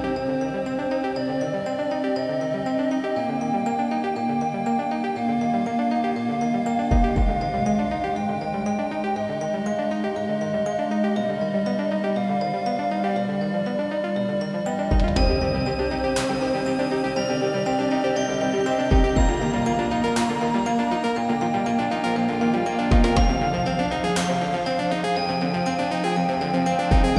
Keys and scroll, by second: 22.1 Delete.